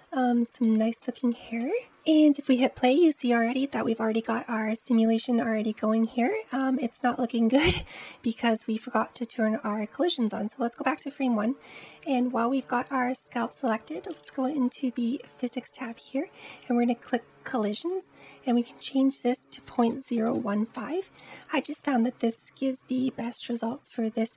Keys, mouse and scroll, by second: 0.4-1.0 scroll up 3, 1.0-1.8 shift+middle drag, 7.6 space, 10.1-13.1 drag, 14.0 click, 16.3-21.5 drag.